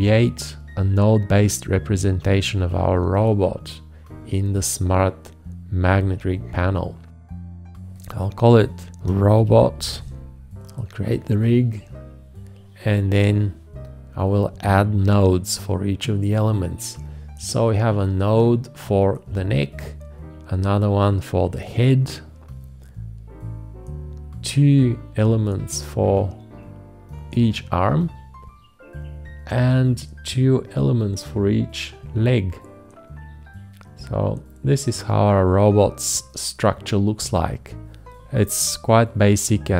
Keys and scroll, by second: 8.8-10.3 typing.